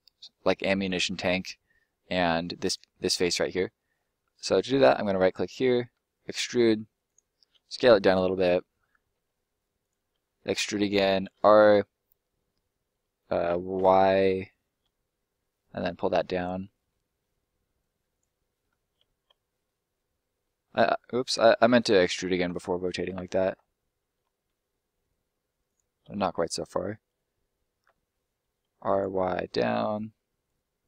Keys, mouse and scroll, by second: 2.7 right click, 3.1-3.5 scroll up 1, 3.5 middle click, 3.9 scroll up 1, 4.1 middle click, 4.7 right click, 5.1 middle click, 5.9 e, 7.0 click, 7.5 s, 8.0 click, 8.3 middle click, 9.1 s, 9.7 click, 10.1 e, 10.8 click, 11.1 r, 13.7 y, 16.3 click, 16.6 middle click, 17.7 click, 18.3 middle click, 18.9 ctrl+middle click, 19.8-20.2 scroll down 1, 20.2 middle click, 20.7 middle click, 21.3 ctrl+middle click, 21.4 ctrl+z, 22.3 ctrl+z, 23.1 ctrl+z, 24.5 e, 25.7 click, 26.0 r, 27.8 y, 28.8 click.